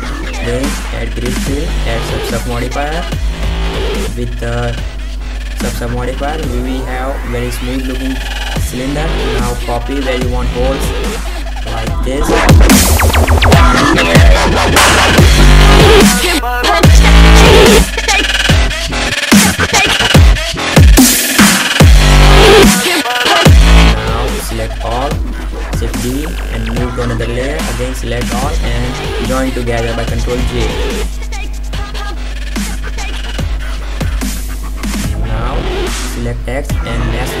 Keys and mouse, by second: 0.5 x, 0.9 click, 1.7 space, 2.2 Tab, 2.4 click, 2.5 ctrl+3, 2.7 ctrl+z, 3.1-4.1 drag, 4.5-6.2 drag, 6.8-7.5 drag, 7.7-8.2 drag, 8.7 middle click, 8.8 KP_5, 9.0 KP_7, 10.2 shift+d, 11.2 middle drag, 11.9 middle click, 12.7-13.2 drag, 13.3 shift+d, 13.6-14.3 drag, 14.8 shift+d, 15.2 click, 16.5 shift+d, 17.2 Delete, 17.6 right click, 17.8 shift+d, 18.2 click, 19.0 shift+d, 19.4 click, 20.7 shift+d, 21.0 click, 22.0 shift+d, 22.3-22.7 drag, 23.0 middle click, 25.8 shift+d, 26.2 m, 26.3 b, 28.2 drag, 29.5 ctrl+j, 35.2 alt+c.